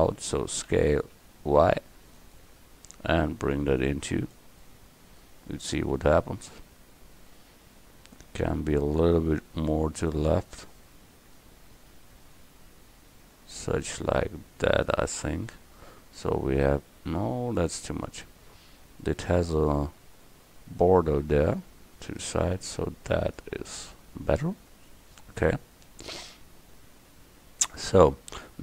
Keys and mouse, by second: 0.7 s, 2.9-5.1 drag, 9.2-12.4 drag, 21.5-24.4 drag, 26.2 KP_1.